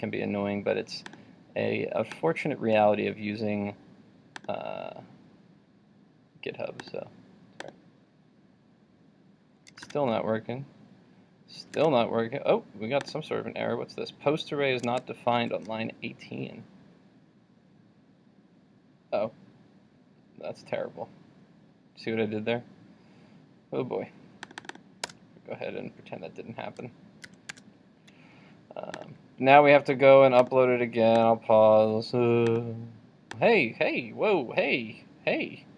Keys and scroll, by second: 9.9 super+r, 15.0 super+Tab, 27.3 super+s, 27.7 super+Tab.